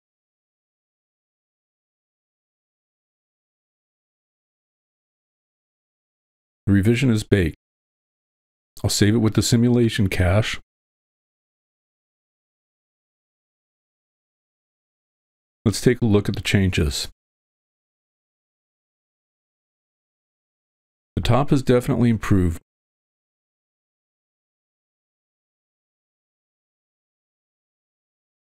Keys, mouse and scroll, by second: 0.1 middle click, 1.0 click, 2.1-5.8 drag, 9.7-11.2 drag, 17.9 click.